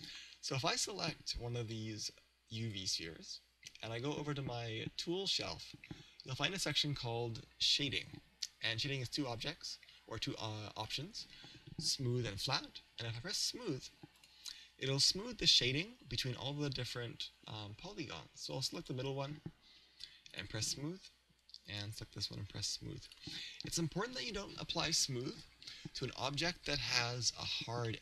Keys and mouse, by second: 2.5-4.2 right drag, 14.2 click, 18.8-20.5 right drag, 20.3 click, 21.7-23.5 right drag, 23.1 click, 25.3-27.1 right drag, 27.1-28.0 middle drag.